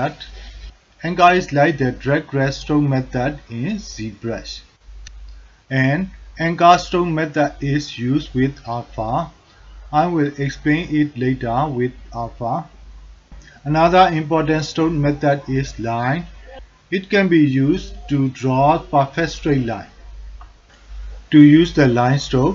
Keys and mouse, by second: 13.7-14.9 drag, 15.4 alt+click, 15.9 ctrl+alt+middle click, 16.3 alt+shift+middle click, 17.5-20.3 drag, 22.2-22.5 drag.